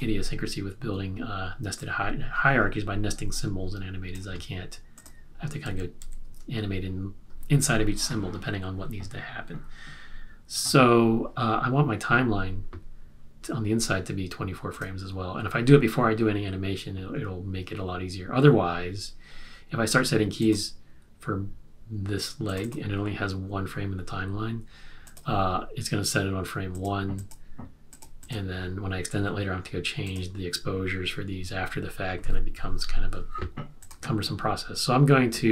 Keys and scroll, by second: 5.6 super+z, 6.1 super+z.